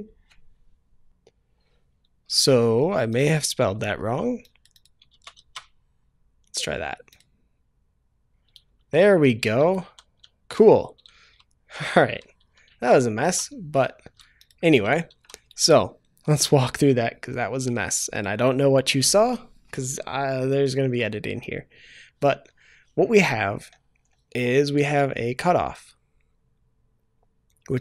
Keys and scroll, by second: 5.1 ctrl+v, 5.3 ctrl+s.